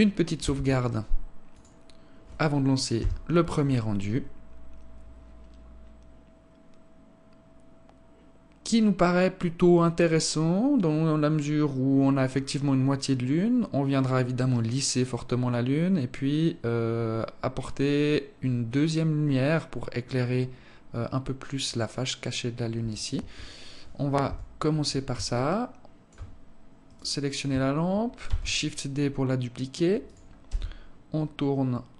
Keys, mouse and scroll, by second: 22.7 Escape, 23.7 KP_7, 24.9 alt+shift+click, 26.4 right click, 27.8 shift+d, 30.1 r.